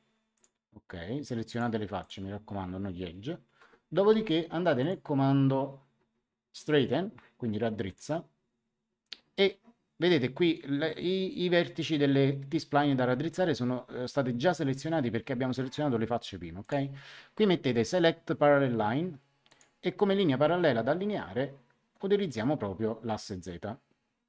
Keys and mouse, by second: 1.4 ctrl+click, 4.7 click, 7.8 click, 16.6 click, 19.4 click.